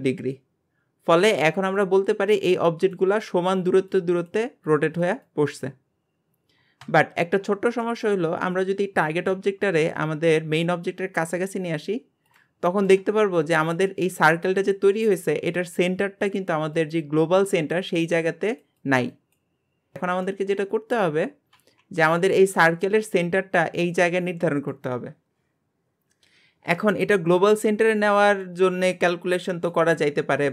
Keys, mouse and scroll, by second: 7.3-7.8 scroll up 1, 7.8-8.5 shift+middle drag, 8.5-9.3 scroll up 1, 9.3 g, 12.7 shift+middle click, 13.0 scroll up 2, 20.0 scroll down 3, 20.3-21.6 shift+middle drag, 21.6 g.